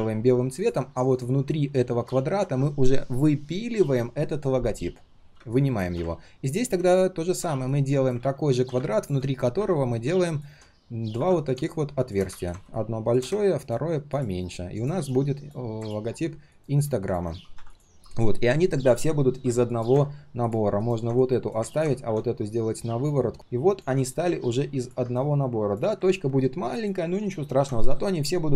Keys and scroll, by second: 2.0 ctrl+z, 8.2 ctrl+z.